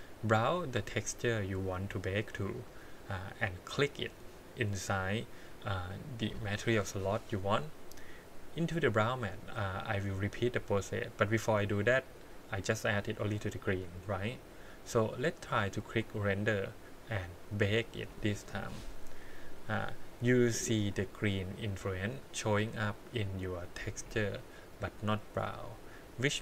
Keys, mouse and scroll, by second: 0.1-1.4 drag, 2.5 click, 3.6 click, 8.6 click, 11.5 click, 15.8 click, 17.6 click.